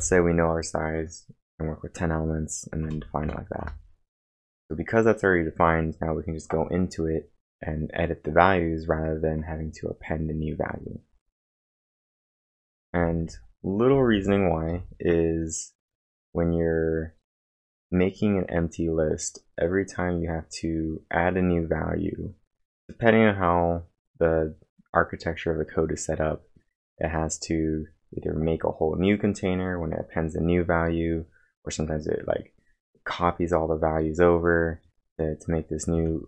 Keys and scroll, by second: 2.6-3.3 typing, 3.6 Return, 5.4-6.2 typing, 12.0 Return, 12.4-14.1 typing, 14.7 Return.